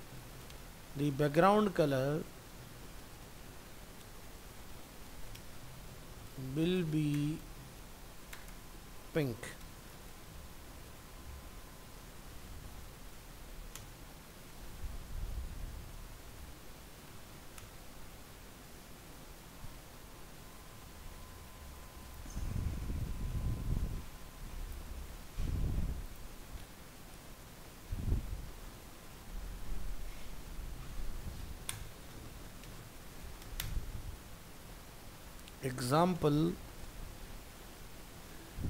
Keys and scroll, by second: 14.6 ctrl+s, 25.0 ctrl+c, 27.9 ctrl+v, 37.9 ctrl+s.